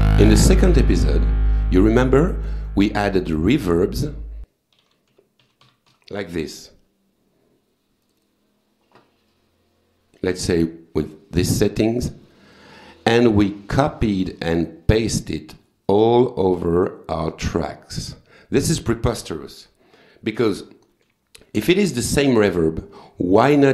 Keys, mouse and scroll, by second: 2.6 right click, 3.3 click, 4.5-6.4 typing, 8.0 click, 9.3-10.5 drag, 12.3 click, 13.5 click, 16.6 click, 17.3 click, 18.7 click, 20.5 ctrl+z, 22.4 click.